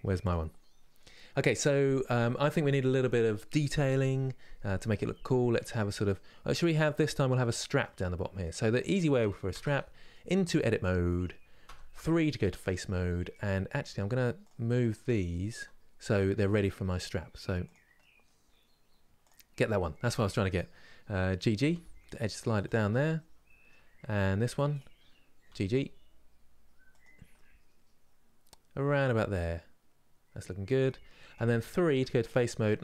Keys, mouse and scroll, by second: 0.7-8.4 middle drag, 8.4 click, 9.2 Tab, 9.8-11.3 middle drag, 11.3 3, 11.7-14.1 middle drag, 14.1 click, 16.6 click, 17.6-18.9 middle drag, 18.9 click, 21.3 g, 22.6-24.0 middle drag, 24.0 1, 25.2 g, 27.1-30.0 middle drag, 32.0 alt+click.